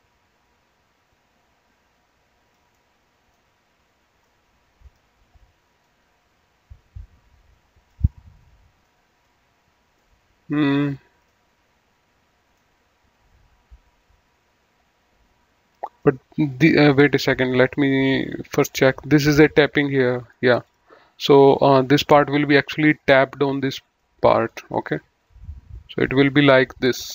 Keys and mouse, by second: 2.7 middle click, 4.2 middle click, 5.7 click, 8.8 middle click, 9.9 middle click, 11.2 middle click, 16.0 middle click, 17.3 click, 17.7 middle click, 18.6 click, 20.6 click, 22.6 right click, 23.4 click, 24.0 middle click, 25.2 click.